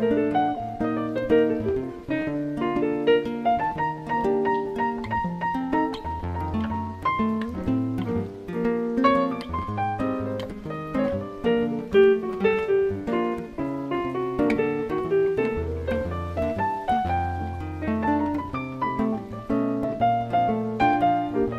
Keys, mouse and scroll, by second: 0.5 click, 0.7 click, 4.4 click, 4.6 click, 6.9 click, 7.6 click, 7.8 click, 9.5 click, 10.0 click, 10.1 click, 12.4 BackSpace, 13.8 shift+t, 17.8 click, 18.6 click, 18.8 click.